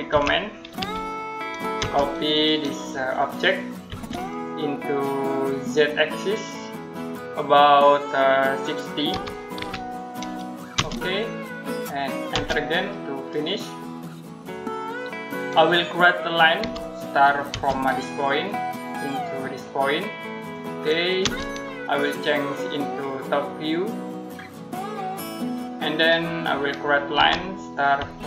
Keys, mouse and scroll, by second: 0.0-0.6 typing, 1.6 space, 3.7 space, 4.0 click, 8.9 click, 9.2-10.6 typing, 13.5 middle click, 16.4 l, 17.3 space, 18.7 click, 21.1 space, 23.0 click, 24.9-25.2 scroll down 1, 25.2 middle click, 25.8-26.1 scroll up 1, 26.3 middle click, 27.0 l, 27.8 space.